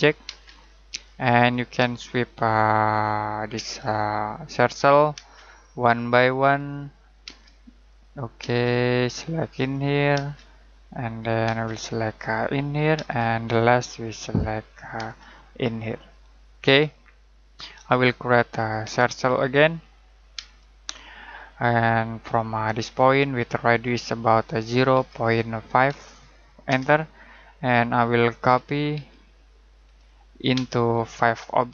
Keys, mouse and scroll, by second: 0.2 space, 1.3 click, 1.8 space, 2.8 click, 3.5 space, 4.5 click, 5.1 space, 6.5 click, 7.2 space, 7.8 click, 8.4 space, 9.5 click, 10.1 space, 11.0 click, 11.4 space, 12.4 click, 12.9 space, 14.1 click, 14.9 space, 15.9 click, 16.6-17.2 scroll down 1, 17.2 middle click, 18.8 c, 20.3 space, 20.9-22.1 scroll up 1, 22.1 click, 24.5 typing, 25.6-26.4 typing, 26.6 Return, 28.3-28.9 typing, 30.5 space, 31.4 click.